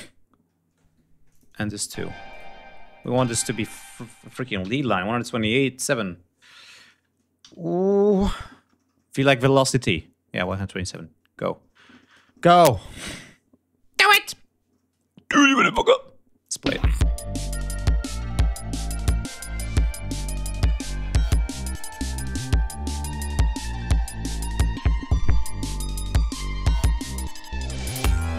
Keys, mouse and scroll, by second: 1.2 click, 1.8 ctrl+a, 2.2 ctrl+click, 2.7 ctrl+e, 2.9 click, 4.5 v, 10.3 click, 10.8 click, 16.3-19.6 drag, 25.4 ctrl+scroll down 2, 25.7 ctrl+scroll up 2, 26.5 ctrl+g, 27.0 ctrl+scroll down 2.